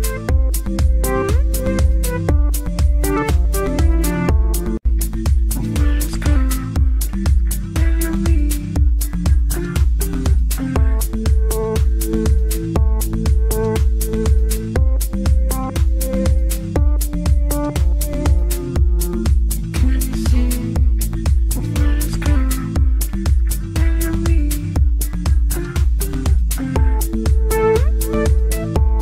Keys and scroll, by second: 10.1 F3.